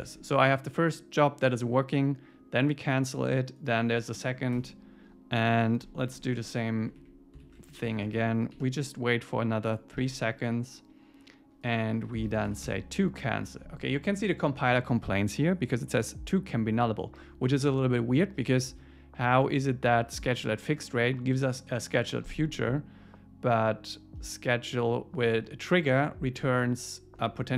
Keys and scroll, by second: 4.6 Return, 6.1 Up, 7.0 Up, 7.4 super+Right, 7.7 shift+Up, 8.0 shift+super+Left, 8.6 super+c, 10.0 super+v, 12.7 Escape.